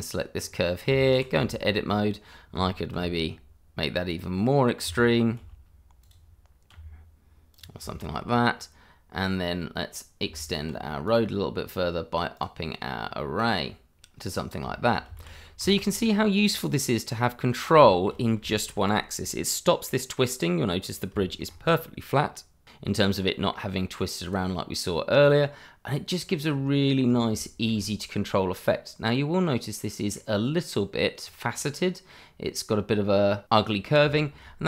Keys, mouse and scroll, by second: 0.4-0.8 scroll up 1, 0.8 Tab, 1.4 shift+middle click, 1.9-2.4 scroll down 1, 2.9 s, 4.4 click, 5.3 g, 6.0 click, 6.7 r, 7.5 click, 7.9 shift+middle click, 8.3-10.2 scroll up 1, 10.2 Tab, 11.0 click, 12.8 double click, 12.9 click, 13.5 double click, 13.8 click, 14.9 scroll down 1, 15.3 shift+z, 15.9 middle click, 17.4-17.8 scroll up 1, 18.0 shift+middle click, 18.5 middle click, 20.8 click, 21.2 shift+middle click, 21.4-23.1 shift+scroll up 1, 23.4 scroll down 1, 23.7 middle click, 25.0 click, 25.4 scroll down 1, 25.6 middle click, 27.0 scroll up 1, 27.7 shift+scroll up 2, 28.4 middle click, 31.2 scroll down 1, 31.5 middle click, 33.8 scroll down 1, 34.1 shift+middle click.